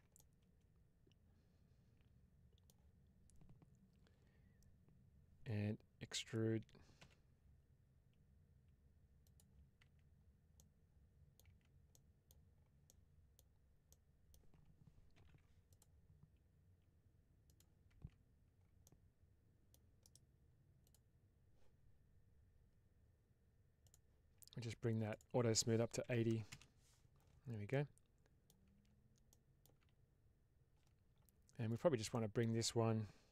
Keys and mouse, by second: 0.1-2.7 middle drag, 6.9 e, 9.1 click, 9.7 Tab, 10.4 middle click, 11.3 Tab, 11.9 middle click, 12.8 middle click, 13.8 middle click, 15.0 ctrl+r, 17.3 click, 17.8 Tab, 18.8-19.6 middle drag, 20.0 right click, 23.7 click, 25.0-26.9 drag, 27.6-28.3 middle drag, 28.7 Tab, 29.3 middle click, 29.7 Tab, 30.6 Tab, 32.0 middle click.